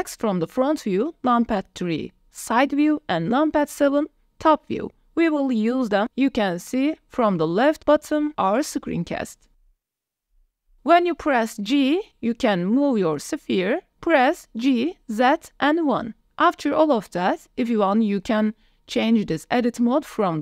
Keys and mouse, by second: 1.1 KP_3, 3.9 KP_7, 8.0 KP_1, 10.2-11.0 middle drag, 11.5 KP_1, 12.9 g, 13.6 z, 14.3 KP_1, 16.6 KP_Enter, 17.7 drag, 19.5-20.4 drag.